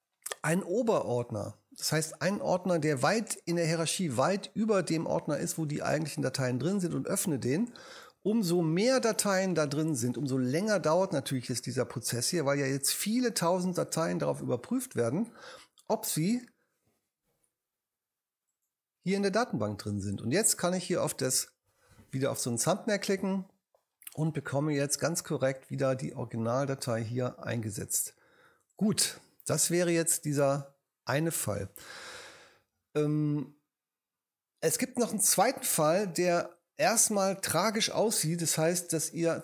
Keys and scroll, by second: 29.7 BackSpace.